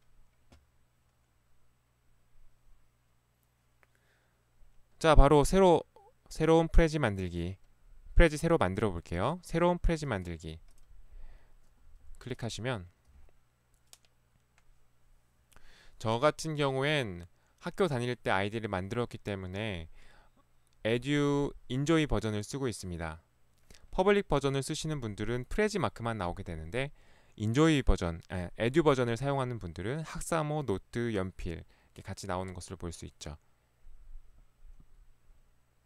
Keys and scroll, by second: 10.4 ctrl+1, 13.2 Escape.